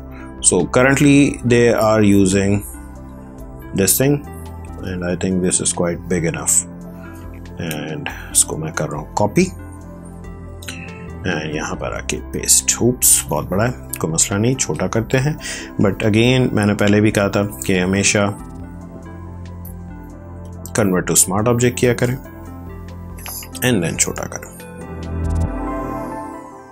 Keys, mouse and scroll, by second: 1.6 scroll down 1, 2.6 scroll up 1, 10.2 scroll up 1, 10.3 alt+Tab, 11.7 ctrl+v, 15.0 ctrl+], 16.7 right click, 20.3 click, 21.5 ctrl+t, 22.9 click.